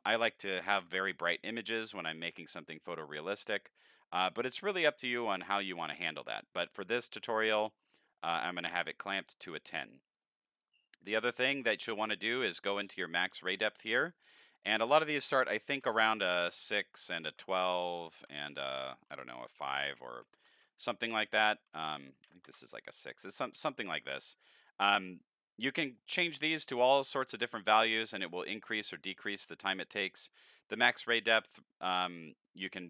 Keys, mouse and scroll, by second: 3.7 click, 5.2 click, 10.1 click, 10.5 click, 11.4 drag, 11.7 click, 14.6 click, 16.3 Tab, 20.3 End, 20.5 Tab, 22.5 KP_Enter.